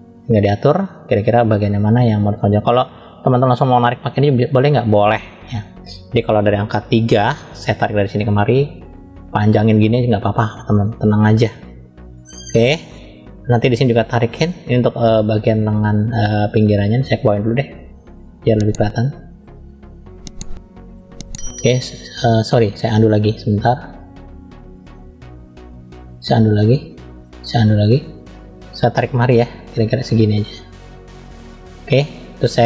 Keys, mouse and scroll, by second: 3.6 click, 4.6-5.7 middle drag, 6.6 KP_3, 8.3 click, 12.0 click, 14.6 click, 16.5 Page_Up, 17.0 shift+middle click, 19.3 click, 22.8-24.5 drag, 25.5-26.1 drag, 26.6-27.3 drag, 29.1 click.